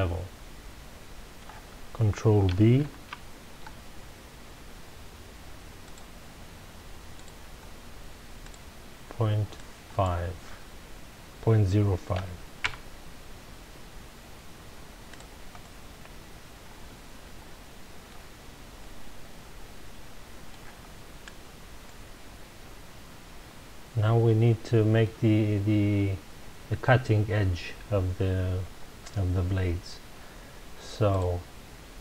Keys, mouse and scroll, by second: 2.8 ctrl+b, 5.9 click, 7.1 click, 8.4-11.4 drag, 12.7 KP_Enter, 15.1 click, 15.6-18.4 middle drag, 18.4-18.8 scroll down 2, 18.8-20.8 middle drag, 20.8-21.5 scroll up 1, 21.8-25.0 middle drag, 31.1 click.